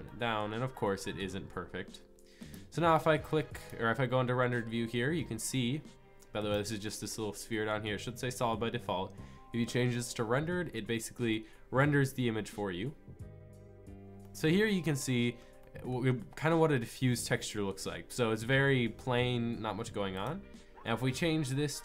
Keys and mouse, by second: 0.0 middle drag, 0.2 middle click, 2.4-3.1 middle drag, 3.7 middle click, 4.0-5.3 drag, 6.4-8.3 drag, 11.3 drag, 14.1 middle click, 15.1 middle click, 16.6 middle click, 20.3-21.8 middle drag.